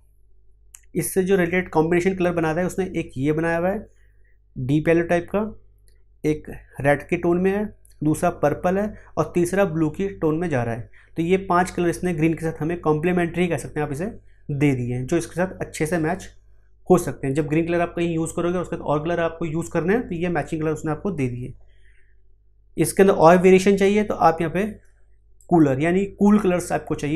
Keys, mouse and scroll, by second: 23.2-25.4 drag.